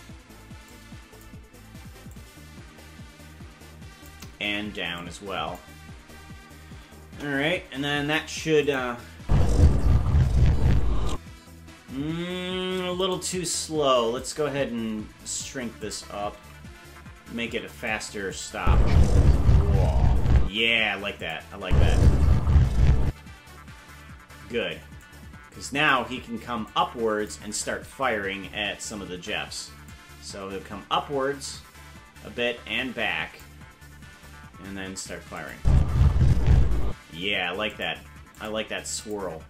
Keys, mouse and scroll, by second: 0.7 click, 2.1-4.1 drag, 4.9 click, 7.0 KP_0, 8.6 click, 9.2 space, 11.1 space, 13.0 right click, 14.2 shift+right click, 15.8 click, 16.3 s, 18.3 click, 18.5 space, 20.5 space, 21.2 click, 21.6 space, 23.0 space, 25.0 click, 26.7 click, 29.8-33.4 drag, 35.4-37.1 drag, 35.5 space, 36.9 space, 37.7 click, 38.4 click, 39.0 click.